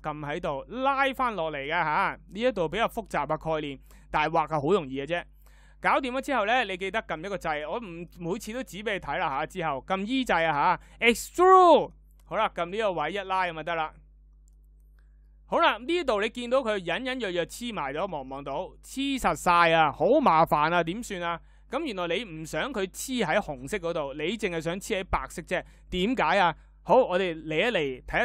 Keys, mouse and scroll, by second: 8.1 e.